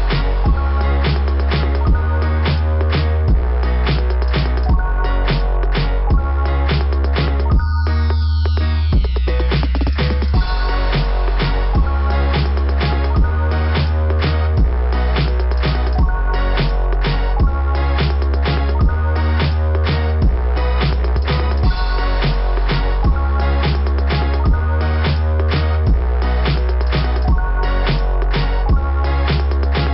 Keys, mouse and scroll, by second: 1.5-1.9 scroll down 1, 3.4-3.9 scroll down 2, 3.9 click, 5.0 click, 7.3 click, 10.1 click, 11.0 click, 14.0 right click, 14.4 right click, 17.9 click, 19.1 right click, 20.8 click, 22.2 click, 24.0 click, 25.3 click, 27.3 click, 27.5 click, 27.8 click.